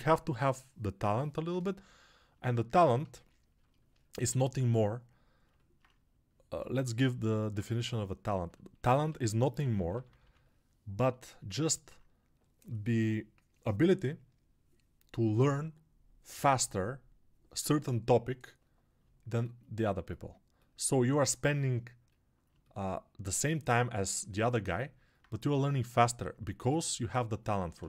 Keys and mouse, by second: 9.0 g, 9.5 ].